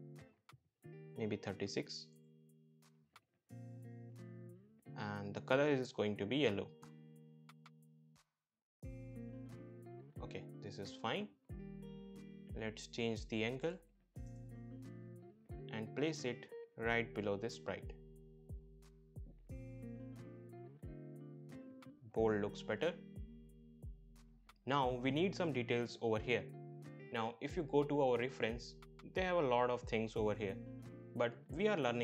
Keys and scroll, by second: 1.8 BackSpace, 2.4 3, 2.7 6, 2.9 Return, 12.8 BackSpace, 13.1 9, 13.2 0, 13.5 Return.